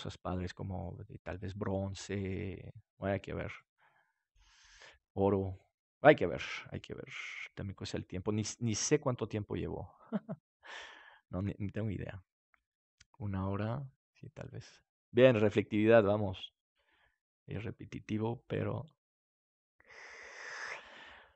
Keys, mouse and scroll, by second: 6.9 middle click, 7.0-8.8 drag, 17.5-20.3 drag.